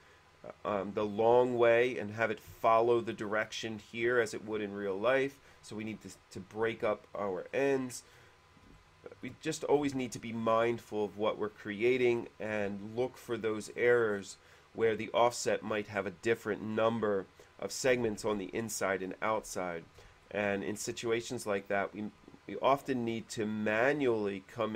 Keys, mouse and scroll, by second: 7.6 middle click, 7.8-8.7 scroll up 2, 8.9 shift+middle click, 9.7 scroll up 2, 13.7 scroll up 2, 14.3 scroll up 2, 16.1 scroll up 2, 16.2 middle click, 20.4-21.7 shift+middle drag.